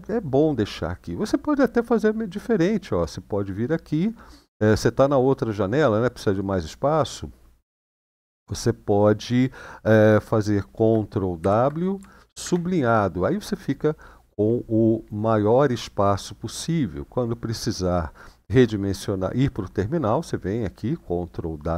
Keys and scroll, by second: 11.2 ctrl+w, 12.2 =, 21.6 ctrl+w.